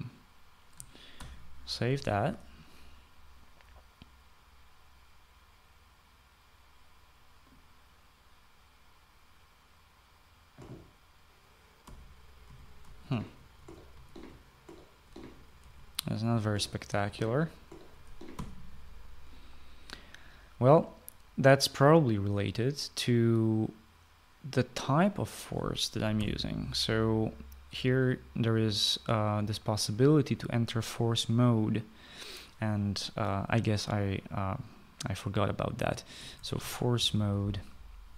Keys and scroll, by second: 1.8 ctrl+s, 12.4-18.2 typing, 18.9 Escape, 26.8 ,, 36.6-38.1 typing.